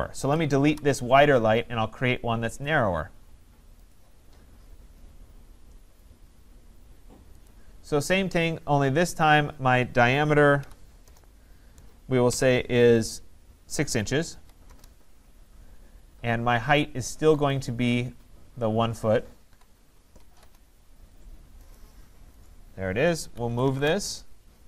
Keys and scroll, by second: 0.7 Delete, 11.0 Return, 20.3 Return.